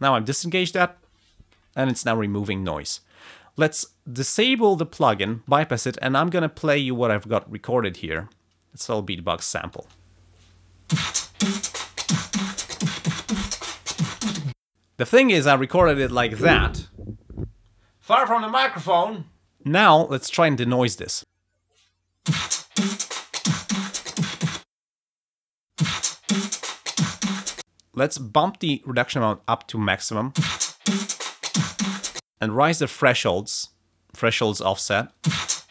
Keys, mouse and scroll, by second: 1.9 space, 3.1 click, 7.3-8.4 drag, 9.7 space, 14.4 space, 21.1 space, 22.1 ctrl+scroll up 2, 24.5 space, 24.8 click, 25.6 space, 27.5 space, 28.3-29.4 drag, 30.2 space, 32.1 space, 33.0-35.1 drag, 35.1 space.